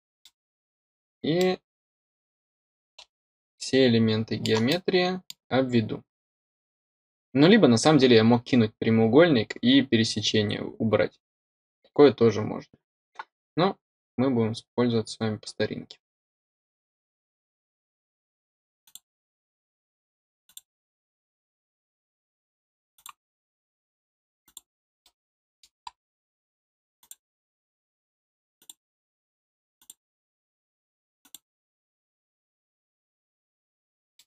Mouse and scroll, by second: 0.1 middle click, 0.7-1.2 scroll down 2, 1.3-4.4 middle drag, 4.6-5.2 middle drag, 17.0 click, 17.9-18.4 scroll up 2, 18.4 click, 19.2 middle click, 19.3 scroll up 2, 19.7-22.1 drag, 22.1 middle click, 22.4 scroll up 1, 22.8 click, 23.3-24.3 scroll up 2, 24.3 click, 24.6 scroll down 1, 24.9 middle click, 25.7-26.4 drag, 26.4 middle drag, 26.8 click, 27.0 middle click, 28.1 drag, 28.4 middle drag, 28.6 middle click, 28.9 middle click, 29.2 middle click, 29.6 click, 29.8 middle click, 30.1 middle click, 30.4 click, 30.5 middle click, 30.9 middle click, 31.2 middle click, 31.3 middle click, 31.9 scroll down 1, 32.0 middle click, 32.6 scroll up 3, 33.2 click, 33.9 scroll down 1.